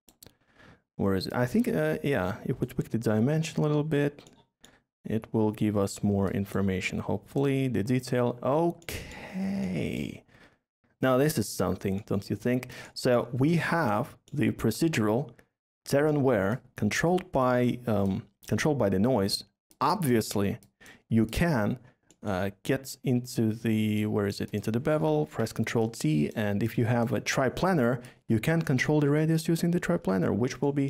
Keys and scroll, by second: 24.9 ctrl+t, 29.9 Delete.